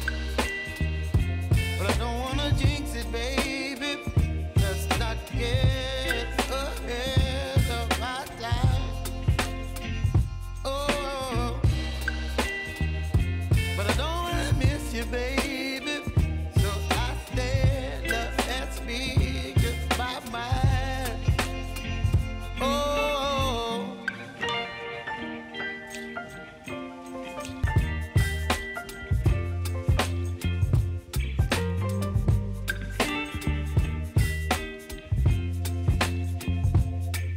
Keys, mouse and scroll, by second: 1.5 click, 2.7 j, 3.5 click, 3.7 k, 4.9-12.6 drag, 12.6 space, 14.5-16.0 drag, 16.0 s, 16.6 click, 19.4 ctrl+z, 20.0-22.8 drag, 22.8 space, 26.1 j, 27.8-30.6 drag, 31.0 s, 31.7 click, 32.8 space, 34.8 click, 35.2 space.